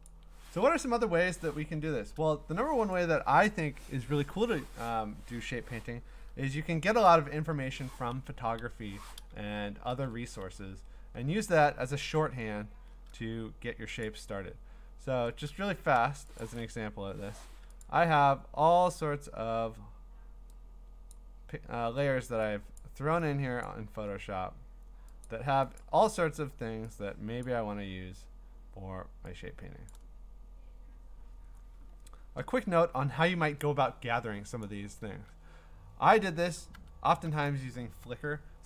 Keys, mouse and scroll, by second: 0.1 click, 3.0 click, 3.3 click, 7.3 click, 7.5 ctrl+a, 8.6 Delete, 9.9 ctrl+d, 10.6 scroll up 3, 10.9 scroll down 5, 11.5 scroll, 14.0 click, 14.3 scroll, 14.4-15.0 scroll down 5, 15.5-16.0 scroll down 1, 16.4 click, 17.0 Delete, 17.8 click, 19.0 scroll down 3, 19.3-19.8 scroll up 4, 21.0-21.9 scroll, 21.1 click, 22.8 click, 23.6 click, 23.9-24.4 scroll, 25.3 click, 25.8 click, 26.0 scroll, 27.5 click, 27.7 scroll, 29.9 click, 30.1-34.0 scroll, 34.6 click, 35.1 alt+Tab, 36.5 alt+Tab, 36.7 alt+Tab, 37.2 alt+Tab.